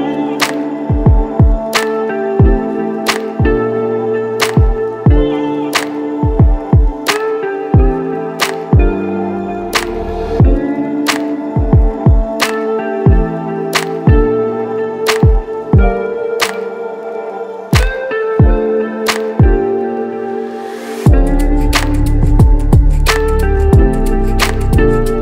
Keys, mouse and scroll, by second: 2.5-6.8 drag, 7.7-8.4 alt+middle drag, 8.6 a, 8.7 a, 9.8-14.6 alt+middle drag, 15.1-15.9 alt+middle drag, 16.1 KP_0, 16.2 KP_0, 17.1 0, 17.2 KP_0, 18.5 click, 19.1-20.1 right drag, 20.5-20.9 KP_Add, 21.4 KP_Add, 21.5-22.1 right drag, 24.3 -, 24.4-24.9 KP_Subtract.